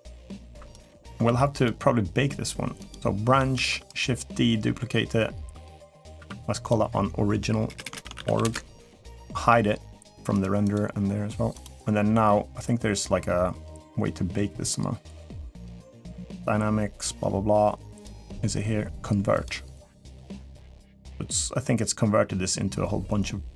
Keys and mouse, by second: 1.0 ctrl+s, 1.3 click, 3.3 shift+d, 5.8 click, 5.9 F2, 7.6 BackSpace, 10.1 click, 10.4 click, 11.4-18.0 drag, 19.2 click.